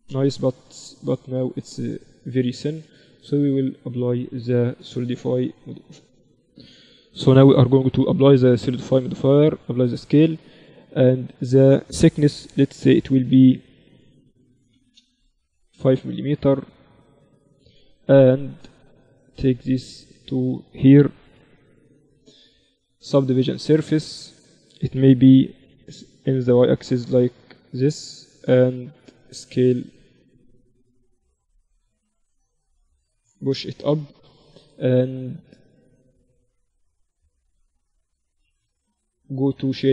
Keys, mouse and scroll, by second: 0.1-5.3 middle drag, 3.3-5.7 drag, 8.9 ctrl+a, 11.3-13.2 drag, 16.4-18.4 drag, 19.3-21.3 drag, 21.3 ctrl+2, 25.5 s, 26.4 click, 27.1-29.8 middle drag, 29.2 s, 29.8-30.3 scroll up 1, 30.9-32.7 drag, 33.0-34.7 drag, 33.7 middle click, 34.0 right click, 34.7 right click, 34.9 middle click, 35.9-38.7 drag, 38.7 t, 39.5-39.9 drag.